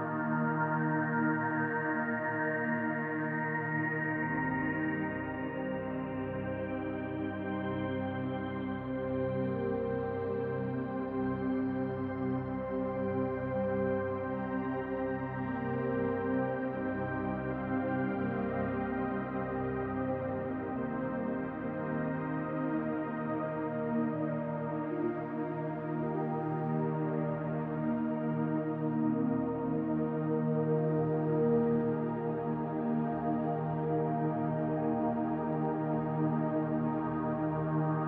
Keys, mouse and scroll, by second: 0.4-0.8 scroll down 5, 2.2 middle click, 2.3 l, 3.3 KP_7, 4.1-5.4 scroll up 1, 5.5-6.2 scroll up 1, 5.5 g, 7.4 r, 9.5 s, 12.4-12.8 scroll up 3, 12.8 shift+middle click, 15.4 click, 17.2 r, 18.8 click, 21.5-22.6 scroll down 3, 23.0 shift+d, 26.0 r, 26.2 g, 29.6 click, 32.4 r, 33.9 click, 35.6-36.7 scroll down 1, 37.0 shift+d.